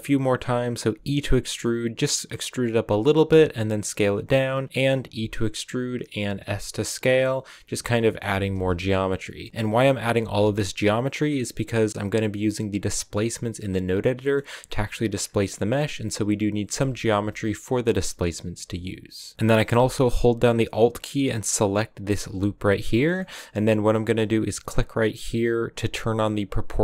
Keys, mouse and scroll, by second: 0.1-0.8 scroll up 1, 0.8 e, 3.2 s, 4.6 middle click, 5.1 e, 6.4 s, 8.0 middle click, 8.2 g, 9.3 middle click, 9.5-10.1 scroll up 1, 10.1 a, 11.0 right click, 14.1-15.1 middle drag, 15.1 scroll down 1, 15.3-16.6 middle drag, 16.6 a, 17.1 a, 18.0 middle click, 18.3 scroll up 1, 18.5 a, 19.3-22.0 middle drag, 22.0 alt+right click, 22.7 scroll down 1, 22.8-26.2 shift+middle drag, 26.6 click.